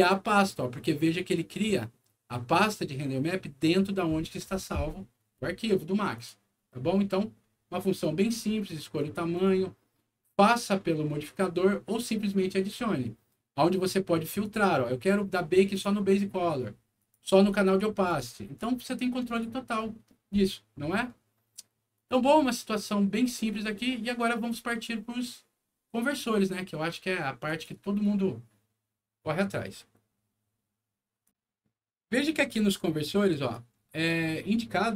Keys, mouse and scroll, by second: 6.1 click, 8.9 click, 9.3 click, 14.4 click, 15.7 click, 16.9 click, 17.6 click, 18.0 click, 18.5 click, 19.3 click, 21.9 click, 23.1 scroll up 1, 23.5 middle click, 26.1 click, 27.4 click, 31.2 click, 33.4 click.